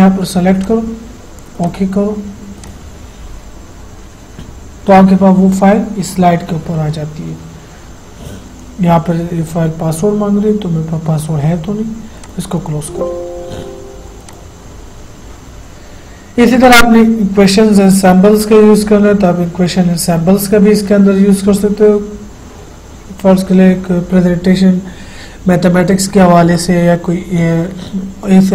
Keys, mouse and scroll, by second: 0.8 click, 12.4 click, 12.5 click, 14.5 click, 16.8 click.